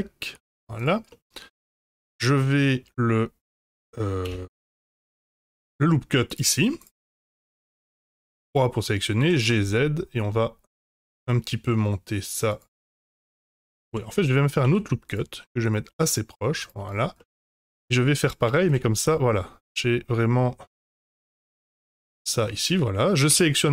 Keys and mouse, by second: 1.1-2.0 middle drag, 2.7-3.4 middle drag, 4.4 ctrl+Tab, 5.2 ctrl+r, 7.2 middle click, 7.7 3, 8.1 click, 9.1 g, 13.8 ctrl+z, 14.1 middle click, 14.6 ctrl+r, 16.8 click, 17.1 middle click, 17.5 3, 18.4 g, 22.4 middle click, 23.2 a.